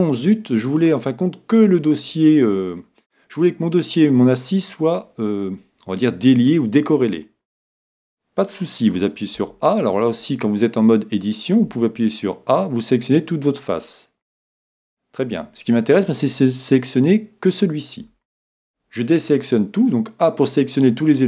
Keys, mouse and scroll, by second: 0.3-2.2 middle drag, 9.4 a, 11.7 a, 18.0 a.